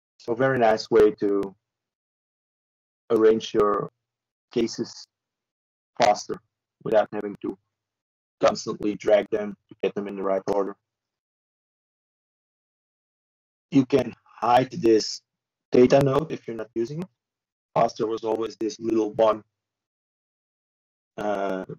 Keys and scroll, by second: 20.8 Return, 20.8 typing.